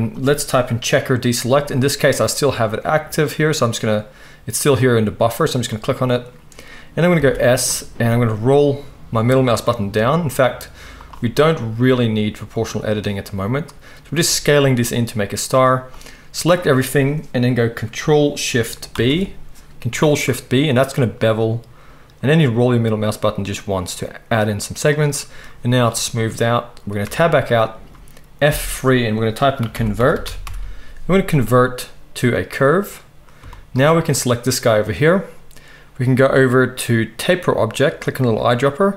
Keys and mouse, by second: 7.1 s, 12.5 click, 12.5 middle click, 14.2 s, 15.9-24.9 middle drag, 18.9 ctrl+shift+b, 20.5 click, 20.5-38.9 right drag, 27.0 Tab, 28.5 F3.